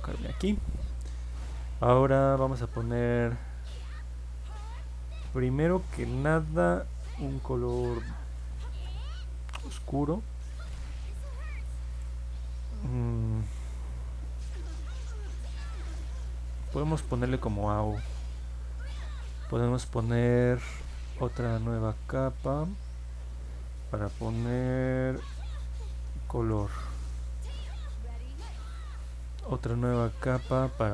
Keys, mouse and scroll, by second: 10.1 click, 12.3 p, 15.8 a, 17.3 Return, 23.2 click, 25.9-27.1 typing.